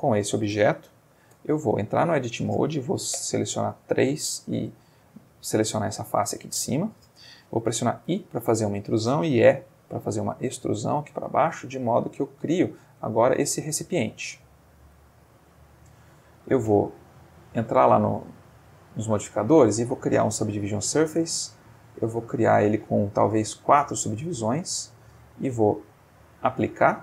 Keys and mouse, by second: 1.3 Tab, 3.2 3, 3.4 click, 4.3 click, 4.9 click, 5.8 click, 6.4 click, 8.0 i, 8.7 click, 9.4 e, 10.9 click, 11.2 middle click, 11.9 z, 12.9 click, 13.4-15.4 middle drag, 15.4 Tab, 15.8 middle click, 17.1 click, 17.8 click, 19.4 click, 21.2 click, 21.8 click, 22.3 click, 23.4 click, 26.1 click, 26.9 click.